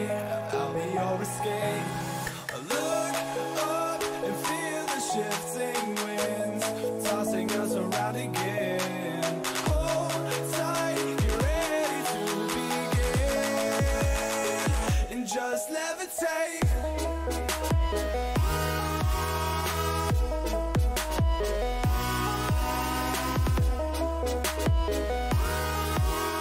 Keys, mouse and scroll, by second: 6.9 a, 7.3-8.7 middle drag, 12.9 ctrl+r, 14.6 a, 16.1 b, 18.9 g, 21.3 a, 23.2 b, 24.8 g.